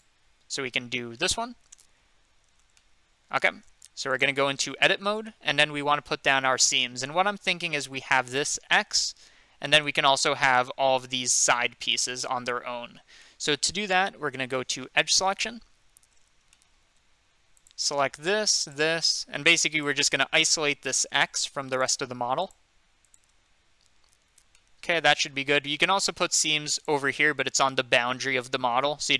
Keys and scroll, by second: 2.5 Tab, 4.5 Tab, 15.2 2.